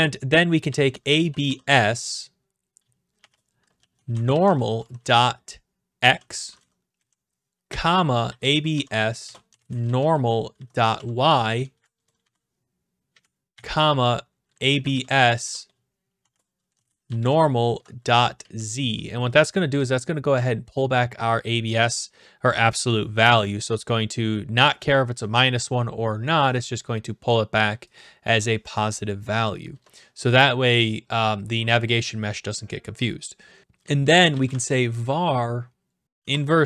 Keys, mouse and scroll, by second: 0.4-1.9 typing, 3.2-11.7 typing, 13.1 Right, 13.5-18.4 typing, 20.7-21.9 drag, 28.0-29.0 drag, 29.7 Return, 33.9-35.0 typing, 36.2-36.6 typing.